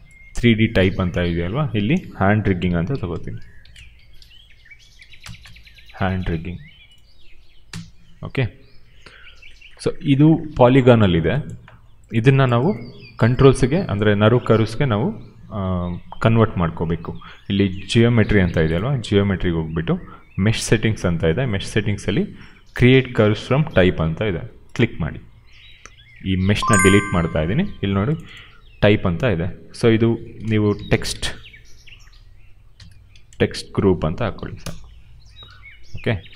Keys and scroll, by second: 2.1-5.8 typing, 7.5 d, 27.0 Delete, 30.4-31.5 typing, 32.7-34.8 typing, 36.2 r.